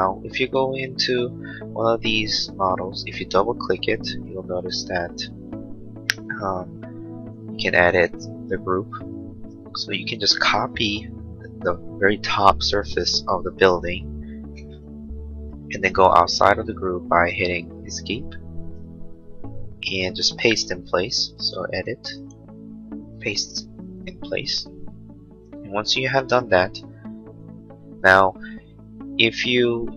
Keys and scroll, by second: 14.5 ctrl+c, 16.5 space, 18.1 Escape.